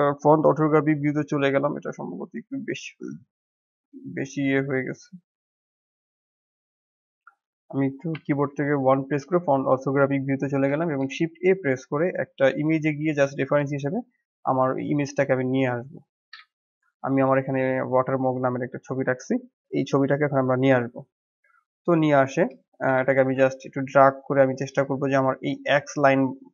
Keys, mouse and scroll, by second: 0.4 n, 1.8-7.6 drag, 7.6 n, 8.3 KP_1, 10.7 shift+a, 21.5-22.2 drag, 22.2-22.5 scroll up 1, 22.5-23.1 shift+middle drag, 23.1 g.